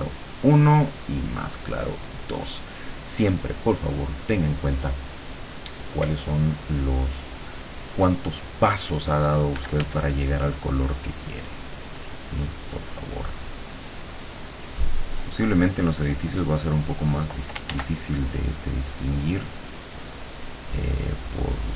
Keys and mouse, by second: 0.3 click, 2.2 click, 9.6 f, 10.8-12.0 drag, 13.4-14.6 drag, 14.8-17.3 drag, 17.8 ctrl+z, 18.1-19.4 ctrl+drag, 20.0-21.7 drag.